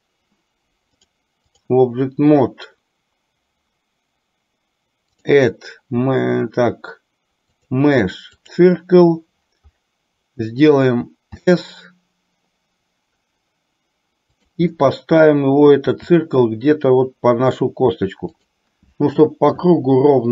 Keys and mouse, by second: 1.1-1.8 drag, 5.1-8.6 drag.